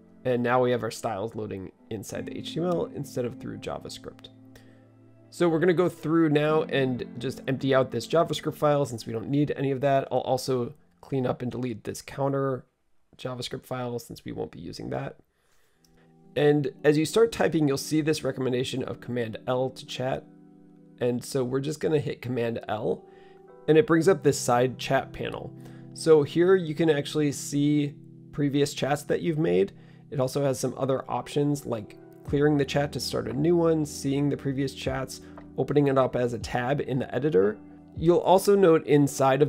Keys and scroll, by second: 7.4 super+a, 9.1 super+s.